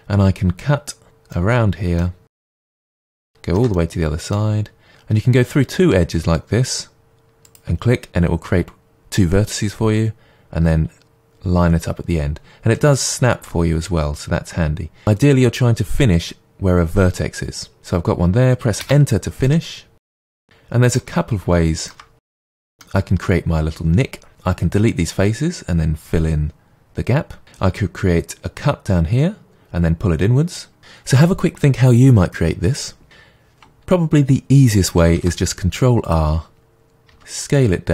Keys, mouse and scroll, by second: 3.2 shift+middle click, 3.7 middle click, 18.9 Return, 19.4 middle click, 20.5-20.9 scroll up 1, 20.9 shift+middle click, 22.5 middle click, 33.0 right click, 35.1 ctrl+r.